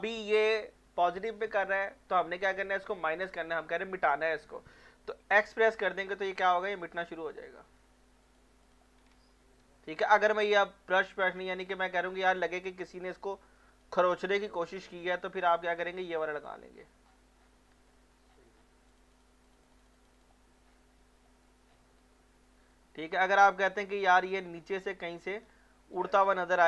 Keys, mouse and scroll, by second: 5.4 x, 6.2 click, 7.7 scroll up 1, 8.2 click, 9.1 ctrl+scroll up 1, 10.5 click, 11.0 scroll down 1, 11.5 ctrl+scroll down 1, 13.1-14.5 drag, 14.5 click, 16.7 scroll down 1, 17.0 scroll up 1, 17.1 scroll down 1, 17.7 alt+middle click, 18.1 scroll up 1, 18.3 scroll down 1, 18.9 click, 20.7 scroll up 1, 21.3 alt+middle click, 21.7 scroll down 1, 22.2 alt+middle click, 23.5 click, 24.6 ctrl+scroll down 1, 25.1 ctrl+scroll up 1, 26.3 click.